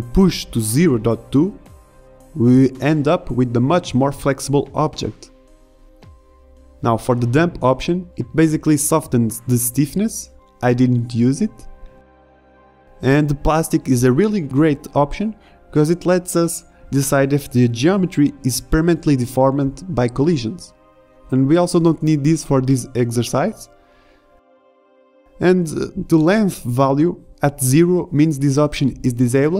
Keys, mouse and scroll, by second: 0.7 alt+a, 1.2 alt+a, 1.9 shift+Left, 2.9 alt+a, 8.8 shift+Left, 8.8 a, 16.1-16.6 middle drag, 16.6 alt+a, 24.9 middle drag, 28.7 alt+a.